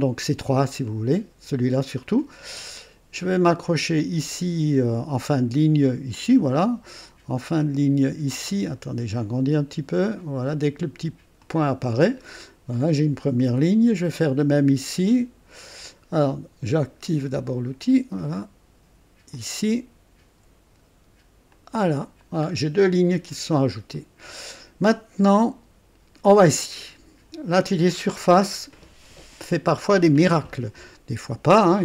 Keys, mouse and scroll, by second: 6.1 click, 8.7-9.1 scroll up 2, 11.4 click, 12.1-12.5 scroll down 2, 12.7 right click, 13.4 right click, 16.8 click, 19.3 click, 21.5 click, 22.2 scroll down 2, 23.5 scroll down 2, 23.9 right click, 24.9 right click, 26.3 click, 28.0 click, 30.4 scroll up 1, 30.9 right click.